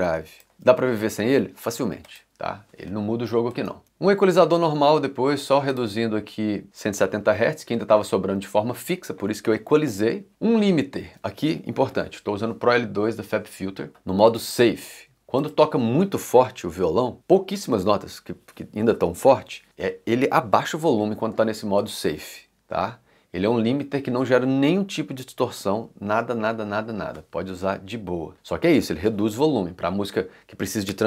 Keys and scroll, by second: 0.5 c, 7.7 c.